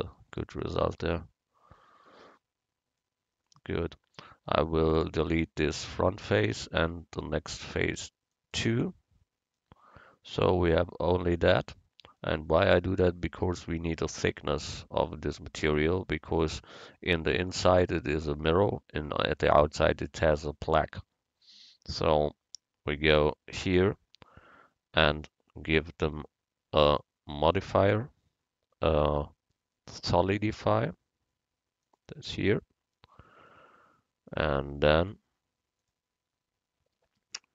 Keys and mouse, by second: 4.5-5.8 right drag, 4.5 x, 6.8 x, 13.7-21.6 middle drag, 25.2 Tab, 26.9-29.5 drag, 35.0-36.9 drag.